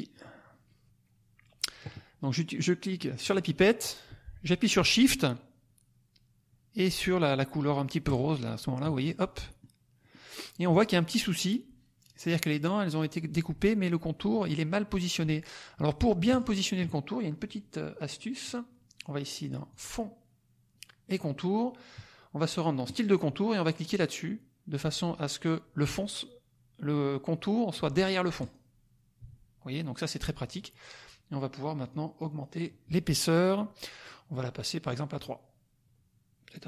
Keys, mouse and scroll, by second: 0.2 click, 3.2 click, 8.0 shift+click, 9.9 middle click, 9.9 scroll up 2, 16.2 click, 18.0 click, 19.7 click, 22.8 click, 28.3 click, 31.8 click, 34.0 click, 35.1 click.